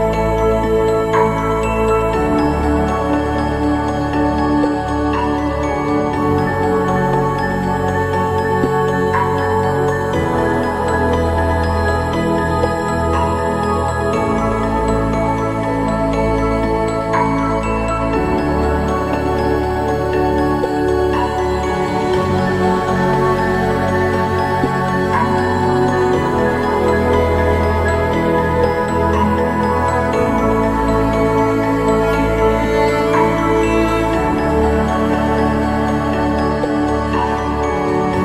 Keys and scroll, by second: 31.8 ctrl+d.